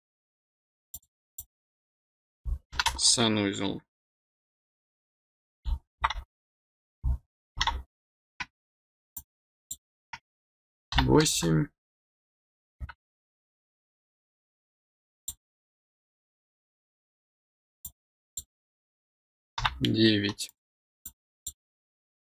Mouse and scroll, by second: 0.9 click, 1.3 click, 9.1 click, 15.1 click, 17.8 click, 20.4 click, 21.0 click.